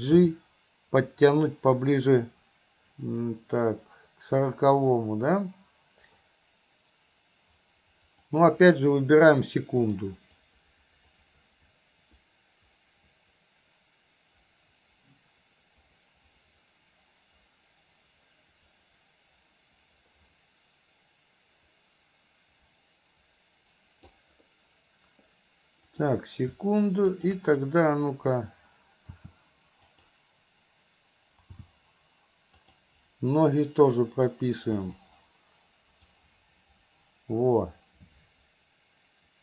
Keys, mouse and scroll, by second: 0.3 g, 10.0 click, 10.5-24.2 drag, 26.0 click, 27.2 click, 29.2 r, 31.6 g, 36.2-39.4 drag.